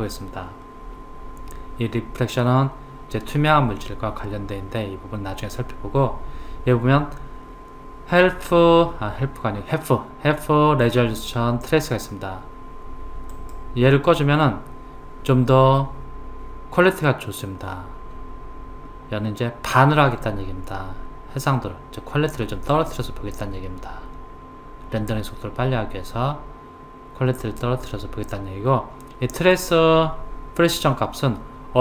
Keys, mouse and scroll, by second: 13.3 click, 22.7 click.